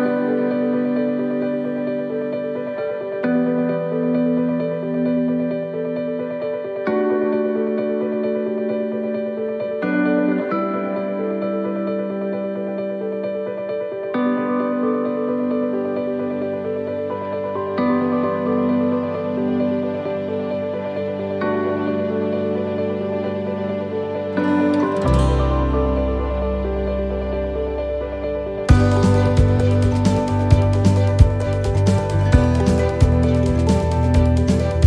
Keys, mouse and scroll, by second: 0.6 click, 4.6-5.2 scroll down 3, 5.3 middle click, 5.9-6.4 scroll up 3, 6.4 shift+middle click, 6.9 scroll up 1, 7.3 middle click, 8.5 ctrl+r, 12.6 middle click, 13.1-13.5 scroll up 2, 13.9 middle click, 14.5 shift+middle click, 15.5 ctrl+r, 19.7 middle click, 20.3-20.7 scroll down 2, 20.9 middle click, 21.9 middle click, 22.5 middle click, 23.3 right click, 25.1 click, 25.9 right click, 26.4 shift+right click, 26.9 right click, 28.0 right click, 28.8 middle click, 29.9 middle click, 31.3 e, 33.0 middle click, 33.5-34.0 scroll up 3, 33.9 middle click.